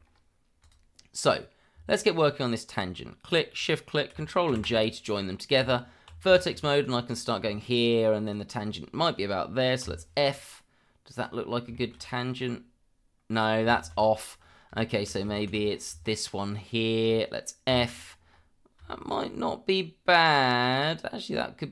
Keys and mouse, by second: 0.6 click, 2.2 shift+click, 4.5 ctrl+j, 5.6 Tab, 6.4 shift+middle drag, 6.8 drag, 7.1 middle drag, 8.2 shift+click, 9.8 f, 11.1 click, 11.7 shift+middle drag, 13.8 ctrl+z, 16.7 shift+click, 17.7 f, 18.9 shift+middle drag.